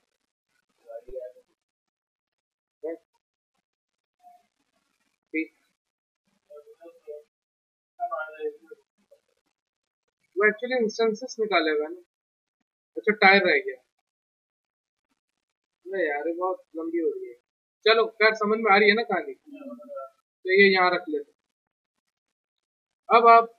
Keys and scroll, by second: 16.4 w, 17.5 w.